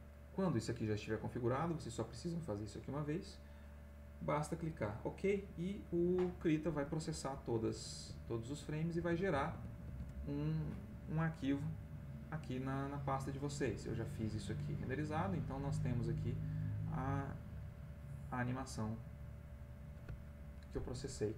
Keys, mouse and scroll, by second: 8.2 alt+Tab, 9.0 alt+Tab, 12.3 click, 15.8 click, 17.8 click, 18.8-21.3 scroll up 1.